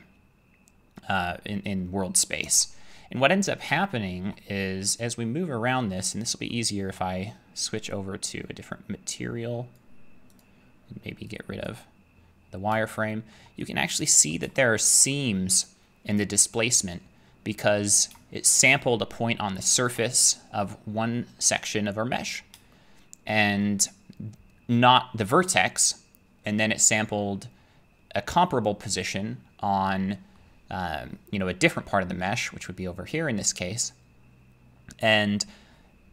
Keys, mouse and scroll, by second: 2.4 Tab, 4.3 shift+middle click, 4.4 middle click, 4.5 middle click, 4.9 middle click, 5.8 middle click, 6.5 middle click, 7.1 middle click, 9.8 click, 10.4 click, 11.7 click, 13.4 shift+middle click, 14.3 middle click, 16.8 middle click, 17.3 scroll, 17.5-18.5 scroll up 8, 18.5-23.1 shift+middle click, 22.8-23.1 scroll, 23.6 middle click, 29.0 middle click, 30.4 middle click, 35.4 middle click.